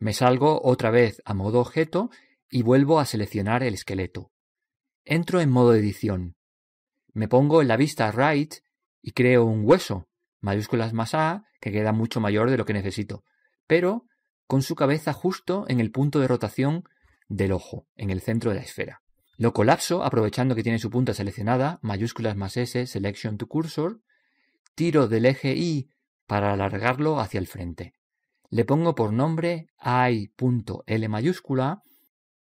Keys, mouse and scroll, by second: 0.1 click, 3.0 right click, 4.9 click, 11.0 shift+a, 11.9-13.7 middle drag, 13.7-14.1 scroll down 1, 14.1 scroll up 1, 14.3-15.5 middle drag, 25.5 click, 28.8-30.0 right drag, 30.0 middle click, 30.5 click.